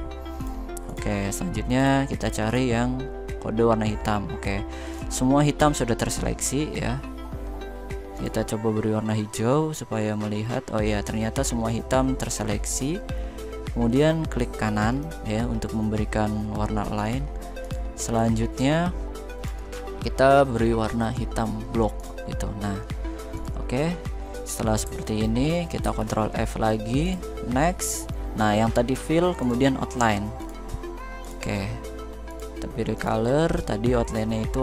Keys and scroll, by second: 25.5 ctrl+f.